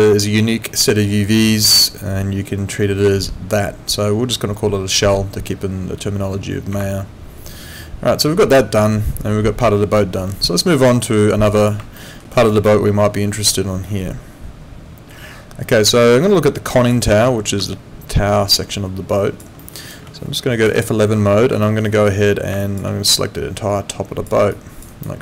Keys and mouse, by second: 6.7 Escape, 10.7 click, 12.0 alt+middle click, 12.3 alt+right click, 12.6 alt+click, 16.9 click, 17.7 alt+click, 19.6 alt+middle click, 19.8 alt+right click, 20.6 F11, 21.6 alt+middle click, 21.9 alt+right click, 22.6 alt+click, 24.5 alt+click, 24.9 alt+right click.